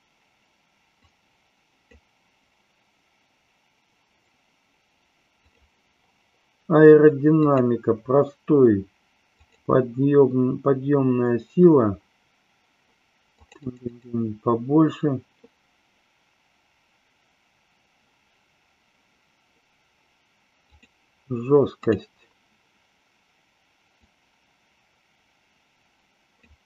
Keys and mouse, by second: 1.0 click, 5.4 click, 7.4-9.5 drag, 13.4 click, 13.9 click, 20.6 click, 21.7 click, 24.0-26.4 drag.